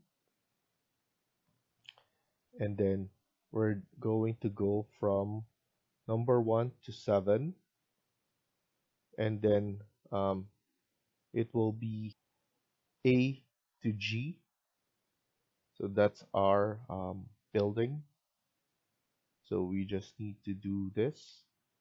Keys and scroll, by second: 12.0 F1.